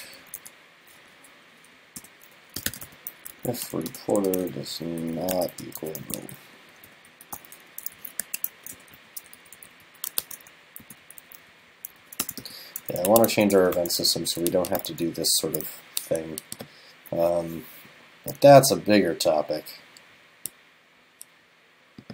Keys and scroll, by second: 8.0 super+Left, 8.6 super+Right, 9.9 super+Right, 10.2 shift+super+Left, 10.9 super+c, 12.0 super+Right, 12.4 super+v, 12.9 super+Left, 13.4 super+Right, 14.0 super+s, 15.0 super+s.